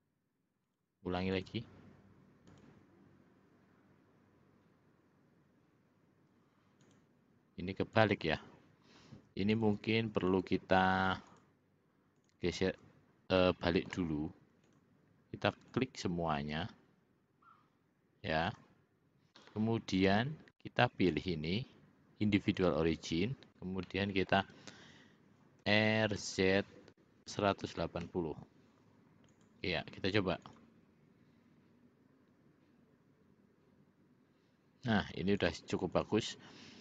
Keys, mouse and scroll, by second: 0.8 click, 1.5 click, 2.6 click, 7.0 click, 8.1 click, 9.7 click, 11.4 shift+click, 12.3 shift+click, 13.5 middle click, 14.8 shift+click, 15.9 shift+click, 18.6 shift+click, 21.3-22.9 drag, 24.0 middle click, 25.8 r, 30.7 click, 35.6 click, 36.0 click.